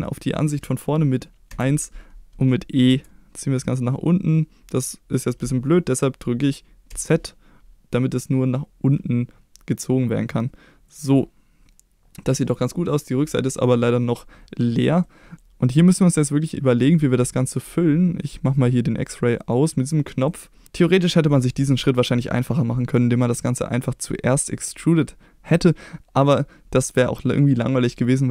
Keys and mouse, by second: 1.5 KP_1, 2.9 e, 6.9 z, 10.9 click, 11.2-13.0 middle drag, 15.1 middle click, 15.7-16.9 middle drag, 20.3 middle click, 25.7-28.3 middle drag.